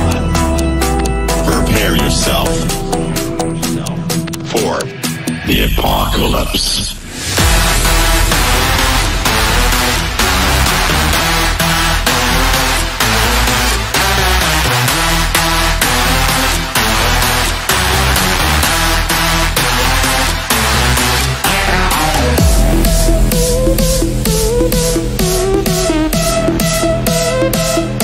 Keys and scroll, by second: 10.1 Escape, 12.5 Escape.